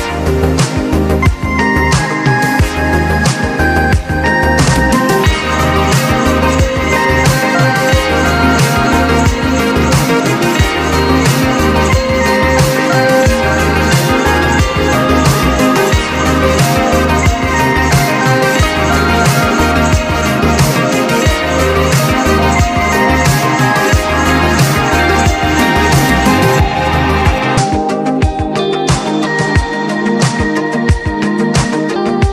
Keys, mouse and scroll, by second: 1.4 click, 2.4 click, 3.9 click, 6.0 click, 7.3 click, 7.4 typing, 9.5 typing, 9.7 alt+scroll down 1, 10.2 click, 11.5 scroll down 1, 12.0-12.4 scroll up 1, 14.1 click, 15.7 right click, 16.5-17.7 drag, 17.7 alt+scroll down 1, 18.1 click, 19.6-24.6 drag, 29.8 click, 30.9 click.